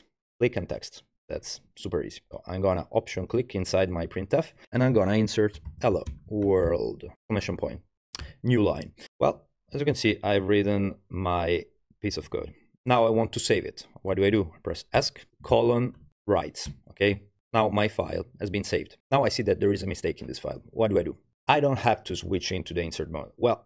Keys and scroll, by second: 4.6-8.7 typing, 9.1 Right, 9.3 Right, 9.8 Left, 10.1 Left, 10.6 Left, 10.7 Left, 10.9 Left, 11.0 Left, 11.3 Left, 11.3 Left, 11.6 Left, 11.6 Left, 11.9 Left, 12.0 Left, 12.2 Left, 12.4 Left, 15.0 Escape, 15.0 Tab, 15.5 shift+., 16.0 w.